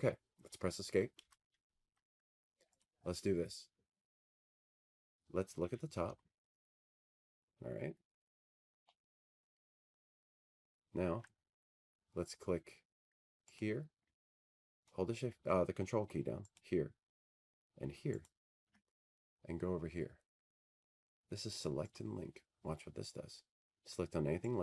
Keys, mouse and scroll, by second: 6.7 Escape, 8.4 click, 11.5 t, 13.2-14.6 scroll, 15.0-15.8 scroll, 19.3 click, 22.2 ctrl+click, 23.9 ctrl+click.